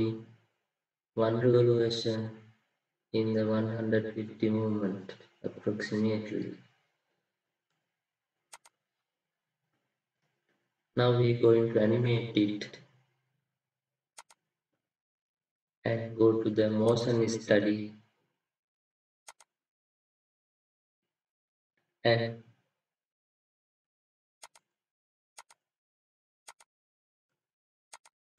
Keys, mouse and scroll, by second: 9.0 typing, 9.9-10.3 scroll down 1, 10.5-11.3 scroll up 1, 13.3-15.3 scroll down 1.